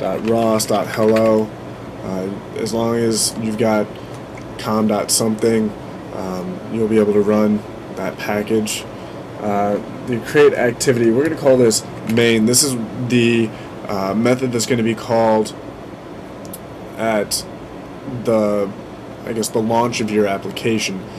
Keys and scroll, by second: 0.0-1.6 typing, 11.6-12.7 typing.